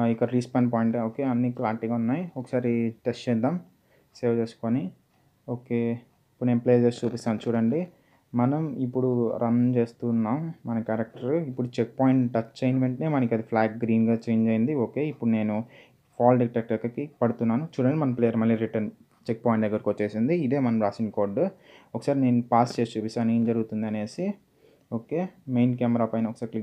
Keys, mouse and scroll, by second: 0.1 click, 5.4 click, 8.5-10.4 typing, 11.5 typing, 14.1-15.9 typing, 19.7-20.4 typing, 20.6 click, 25.2-25.8 scroll down 1.